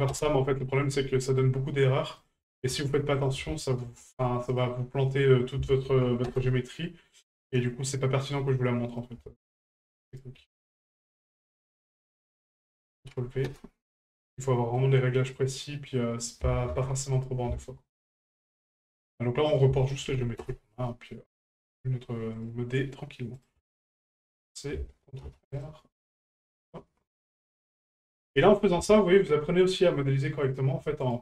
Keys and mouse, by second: 1.3 right click, 2.2-3.3 drag, 5.4 ctrl+click, 7.9 right click, 8.9-10.3 ctrl+drag, 12.4-13.6 ctrl+drag, 14.5 middle click, 15.3 right click, 16.3-17.3 ctrl+drag, 19.5-20.5 drag, 21.4 shift+middle click, 22.3 right click, 23.3-24.5 drag, 27.2 ctrl+click, 28.9 shift+middle drag, 29.5 middle drag, 30.4 right click, 31.0 shift+right drag.